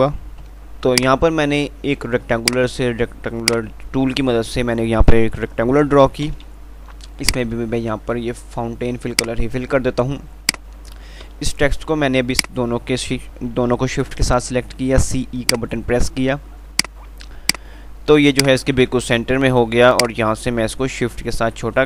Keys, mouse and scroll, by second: 0.5-1.3 typing, 3.7 ctrl+click, 6.5 F11, 7.5 click, 7.8 ctrl+r, 9.5 right click, 12.6 shift+click, 14.8 c, 15.8-21.8 drag, 20.0 typing.